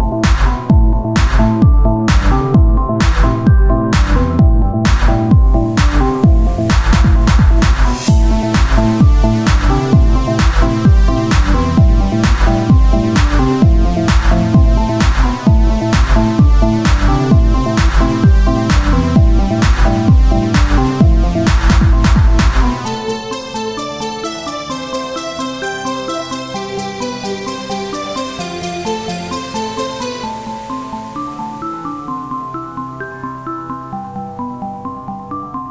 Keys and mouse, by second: 1.3 Tab, 2.7 KP_1, 3.5 Tab, 6.2 c, 6.7 click, 7.2 e, 9.3 click, 10.0 Tab, 11.8 KP_1, 12.8 r, 14.6-17.5 drag, 17.8 Tab, 20.0-22.4 drag, 20.2 Tab, 25.4 z, 26.4 c, 27.0-28.3 drag, 27.0 z, 28.8 Tab, 30.9 click, 32.3 Tab.